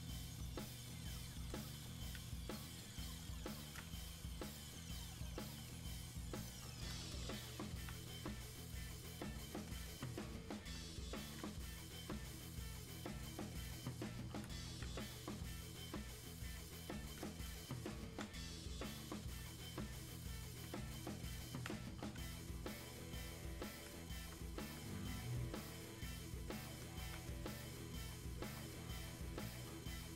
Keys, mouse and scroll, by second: 22.0-30.1 drag.